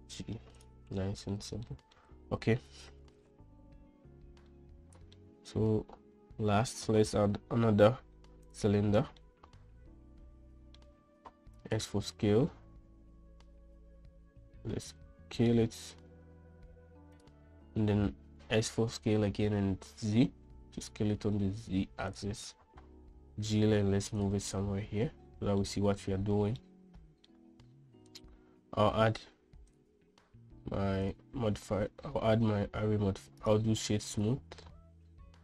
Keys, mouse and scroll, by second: 0.3 g, 1.5 middle click, 2.2 shift+middle drag, 5.0-5.6 middle drag, 8.4 shift+a, 9.7-11.3 middle drag, 12.0 s, 18.9 s, 23.7 g, 25.1-26.1 middle drag, 27.2-27.8 middle drag, 30.2 right click, 33.9-34.8 drag, 34.7 right click.